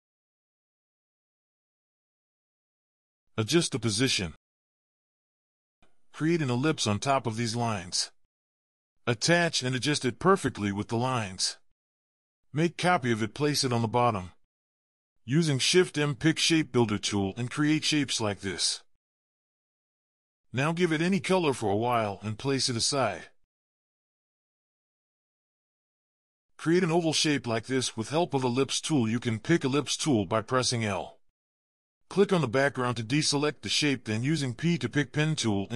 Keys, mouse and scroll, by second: 5.3 typing, 5.6-6.6 scroll up 6, 6.6 typing, 7.9 typing, 10.5-11.2 scroll down 1, 11.2-12.4 scroll down 5, 13.0-13.5 scroll down 2, 13.9-14.4 alt+scroll down 1, 14.4 alt+click, 17.1 m, 20.4 typing, 21.3 double click, 22.5 double click, 23.8 ctrl+g, 25.6 ctrl+scroll down 1, 28.0 typing, 30.4 typing, 31.8 typing.